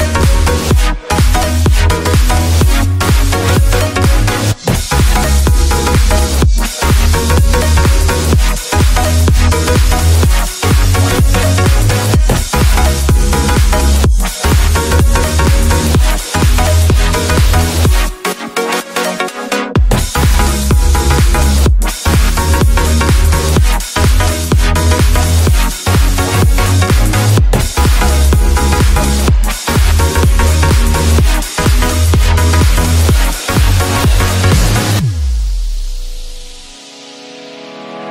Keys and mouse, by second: 2.3 click, 4.0-6.1 drag, 8.3 click, 11.2-13.0 drag, 14.2 a, 14.3 a, 18.5 click, 18.7 ctrl+z, 19.0 click, 19.9 click, 33.3 ctrl+s, 33.5 a, 33.7 a, 37.3 click.